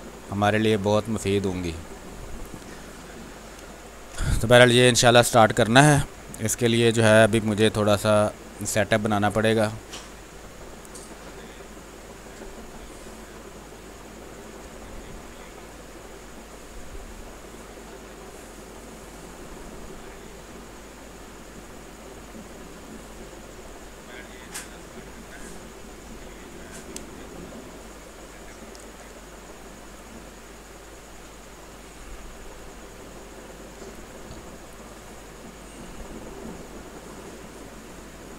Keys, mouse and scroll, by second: 1.9 alt+click, 3.6 space, 3.8 click, 6.0 r, 6.2 click, 7.3 b, 7.6 space, 7.8 ctrl+click, 8.1-12.6 drag, 12.6-14.3 drag, 14.3 space, 14.6 alt+click, 15.6-17.4 drag, 21.4 click, 23.6-25.4 drag, 25.4 r, 25.6-27.9 drag, 27.9 click, 28.2 space, 29.5-31.6 drag, 31.6 ctrl+z, 32.1-33.9 drag, 33.9 space, 34.0 click, 34.6 space, 35.0-37.2 drag, 37.2 space, 37.4 click, 37.9 space.